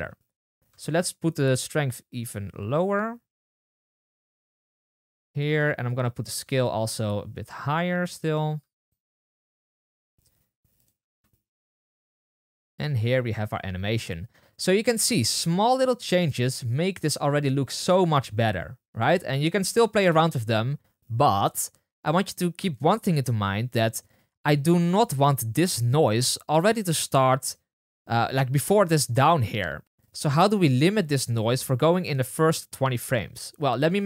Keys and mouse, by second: 3.8 space, 5.2 space, 6.7 click, 10.9 space, 14.2 space, 15.1 space, 17.1 space, 26.5 space, 26.7-29.8 space, 31.2-34.0 drag.